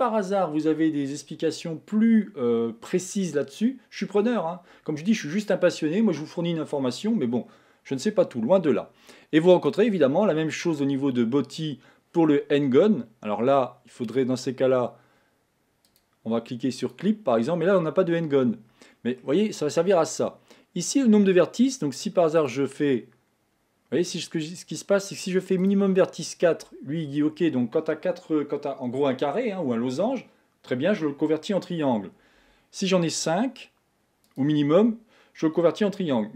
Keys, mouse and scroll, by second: 9.7-12.7 drag, 15.9-17.8 drag, 17.8-20.8 middle drag, 22.4-23.8 drag, 25.6 click, 34.3 click, 36.0-36.3 middle drag.